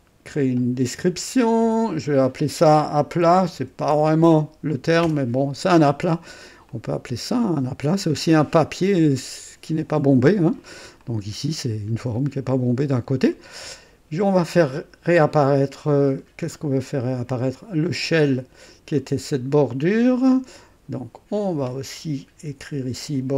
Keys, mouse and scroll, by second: 0.3 click, 1.6 F2, 2.9-5.0 typing, 5.0 Return, 6.2 click, 6.7-8.5 drag, 10.4 scroll up 1, 11.0-13.9 drag, 12.5-13.8 typing, 16.0 scroll up 2, 16.3 typing, 17.5 click, 18.0 typing, 18.9 right click, 19.4-20.1 typing, 19.6 right click, 21.3 click, 22.5 F2.